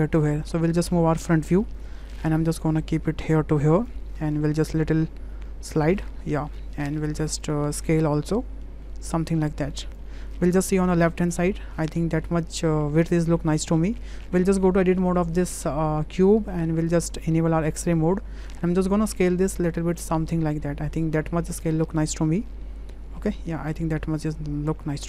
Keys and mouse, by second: 0.3 `, 1.9 shift+middle click, 2.5-3.9 drag, 4.7-5.8 drag, 8.4-9.9 drag, 9.9-11.6 middle drag, 12.0-13.9 middle drag, 14.3 Tab, 16.3 click, 18.7 shift+click, 19.3-24.2 drag.